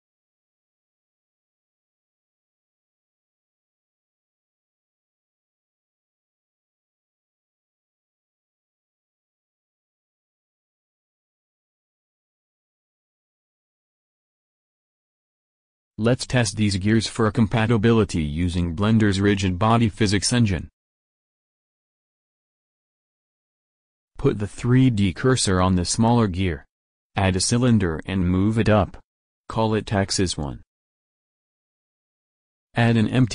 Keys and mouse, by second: 0.0-1.2 drag, 1.0 w, 2.0 middle click, 4.6 a, 5.3 middle click, 6.2 middle click, 6.5 middle click, 6.8 click, 7.5 e, 11.9 w, 13.7 Tab, 24.4 click, 25.3 shift+s, 26.8 shift+s, 28.2 shift+a, 30.6 g, 32.2-33.3 drag.